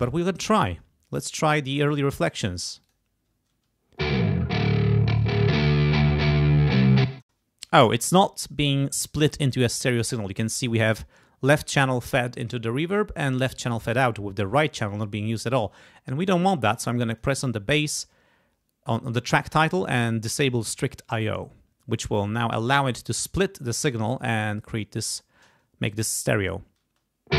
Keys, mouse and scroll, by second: 0.5 click, 1.7 click, 2.8 click, 3.5 space, 4.0 click, 5.4 click, 7.1 space, 17.1 click, 21.3 click, 26.8 space.